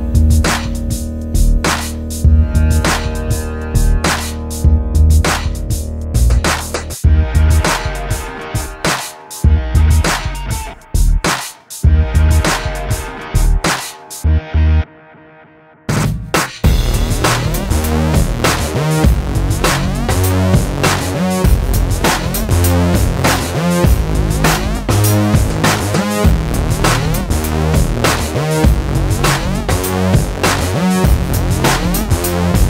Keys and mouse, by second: 0.0 e, 0.3 click, 0.6 z, 1.0 x, 1.8 ctrl+Tab, 2.1 z, 3.1 alt+m, 3.6 middle click, 3.9 a, 4.0 click, 4.4 alt+m, 4.8 middle click, 5.1 a, 5.2 z, 6.0 click, 7.4 a, 7.7 ctrl+r, 8.6 s, 9.1 ctrl+r, 9.9 s, 10.7 ctrl+r, 11.2 click, 11.4 a, 11.9 ctrl+r, 13.2 middle click, 13.6 middle click, 14.0 KP_1, 14.4 middle click, 14.5 click, 14.9 click, 15.2 z, 15.3 KP_7, 15.5 a, 15.8 click, 16.3 click, 16.6 click, 16.7 middle click, 17.0 z, 17.2 a, 17.4 ctrl+r, 18.3 click, 18.6 a, 19.3 ctrl+s, 19.8 KP_1, 20.9 middle click, 21.4 z, 22.2 z, 22.8 middle click, 23.2 middle click, 24.2 middle click, 25.1 middle click, 25.6 click, 25.9-27.3 drag, 27.9-29.0 drag, 29.1-30.4 middle drag, 30.7-32.0 drag, 32.0 t, 32.5 click.